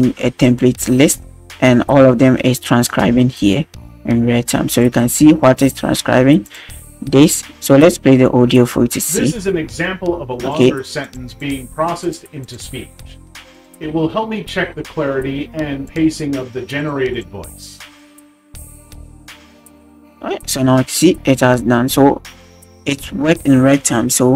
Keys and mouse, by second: 4.8 click, 8.5 drag, 12.0-24.3 drag.